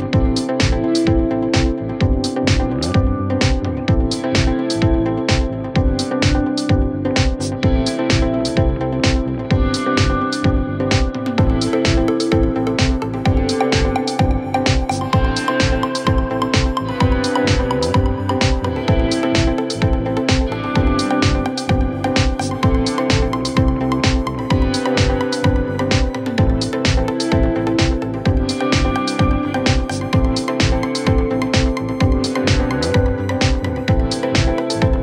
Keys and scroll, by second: 9.9 ctrl+z, 28.4 5, 28.6 Return.